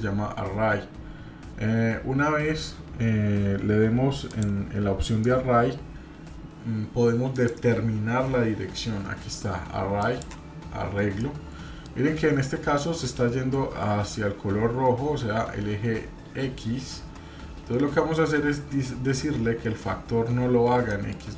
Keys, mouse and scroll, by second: 7.3-10.3 drag, 11.2-11.9 middle drag, 20.9 middle click.